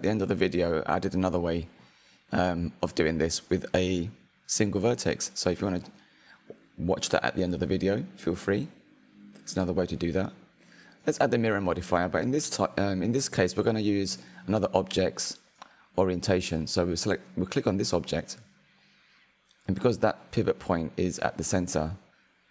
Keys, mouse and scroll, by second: 0.0-3.5 middle drag, 3.5 click, 4.2-6.0 middle drag, 6.0 click, 7.9-8.9 drag, 8.9-10.3 middle drag, 10.3-11.3 drag, 12.7 click, 13.5 click, 14.4-18.0 shift+middle drag, 18.0 click, 21.5 click, 22.0-22.5 middle drag.